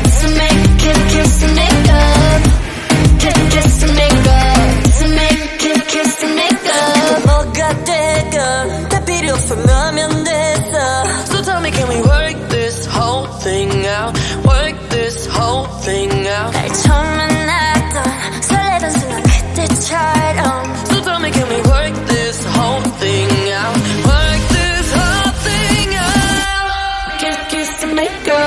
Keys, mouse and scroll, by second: 0.4-1.9 middle drag, 1.9 KP_7, 2.3 middle click, 2.9 click, 3.1 space, 4.0 space, 4.1-7.5 drag, 8.9-9.8 drag, 10.0-10.8 scroll down 24, 10.2 middle click, 10.8 click, 11.6 i, 12.3 v, 12.8 click, 13.3 space, 13.8 KP_0, 14.1-14.6 scroll up 4, 14.6 click, 16.0 Tab, 16.4 Tab, 16.7 click, 17.9 space, 20.2 click, 20.7 space, 21.6 space, 23.5-26.8 drag, 27.2 drag, 27.4 click.